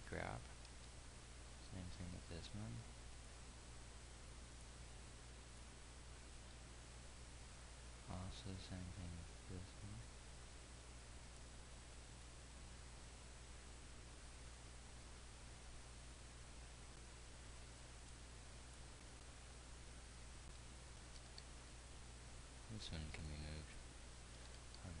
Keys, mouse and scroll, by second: 1.1 g, 7.0 g, 13.3 g, 20.8 g, 24.1-25.0 drag, 24.9 g.